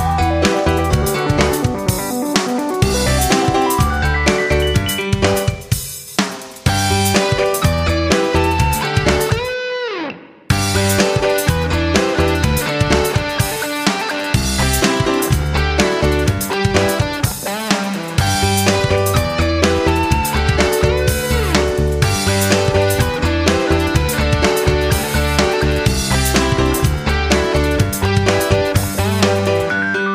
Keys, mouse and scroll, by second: 8.7 click, 14.3 F9, 16.5-22.6 drag, 24.7 shift+click.